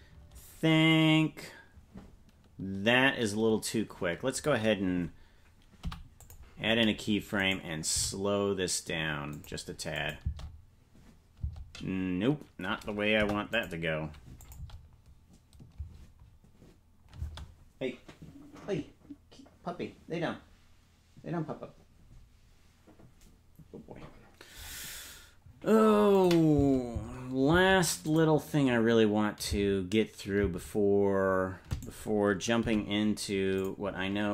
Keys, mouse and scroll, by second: 0.9-4.4 drag, 5.8 i, 7.3 right click, 7.9 g, 9.9 click, 10.2 space, 13.1 Delete, 13.1 space, 14.4 click, 14.5 space, 18.1 space, 26.1 click, 26.5 space, 28.0 click, 28.0 space, 29.4 space, 30.8 space, 31.7 right click, 32.6 g.